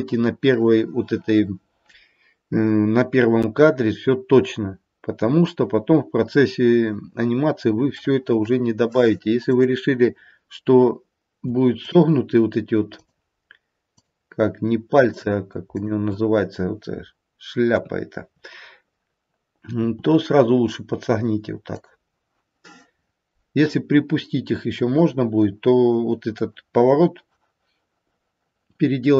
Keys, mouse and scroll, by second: 7.9 middle click, 8.8 middle click, 9.4 click, 11.6 shift+click, 12.8 shift+click, 15.0 shift+click, 15.8 shift+click, 17.7 KP_3, 19.7 r.